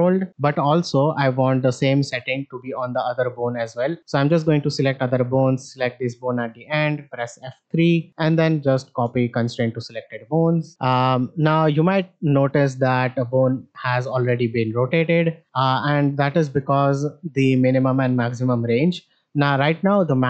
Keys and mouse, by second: 2.1 click, 4.1 shift+click, 5.6 shift+click, 7.3 F3, 9.9-10.2 shift+middle drag, 10.7-12.2 drag, 12.6 shift+middle drag, 13.6 click.